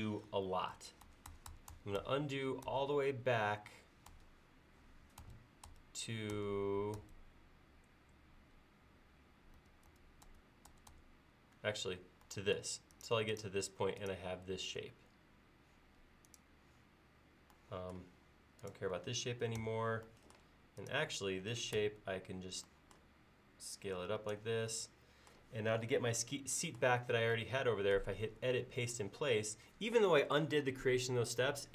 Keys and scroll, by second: 0.8 super+z, 4.1 super+z, 5.2 super+z, 9.6 super+z, 19.6 BackSpace, 21.8 s.